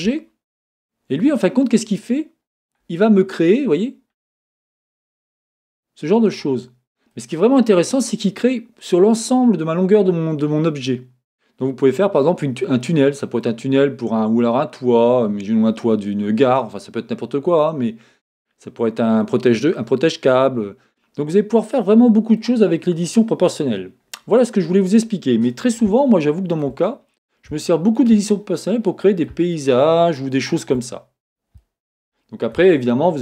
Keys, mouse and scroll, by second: 0.0-6.4 drag, 0.0 g, 7.1-33.2 middle drag, 23.9-24.5 scroll down 2, 28.3-28.9 scroll up 2, 31.0-31.6 scroll up 2, 31.6 scroll up 1.